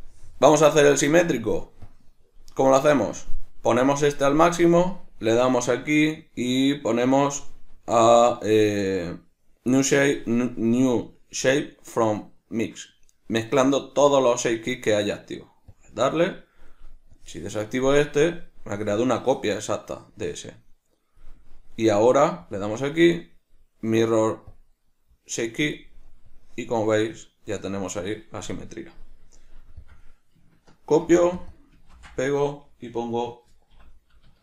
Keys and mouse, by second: 0.0-29.8 drag, 29.9-31.4 drag, 31.5-34.4 drag.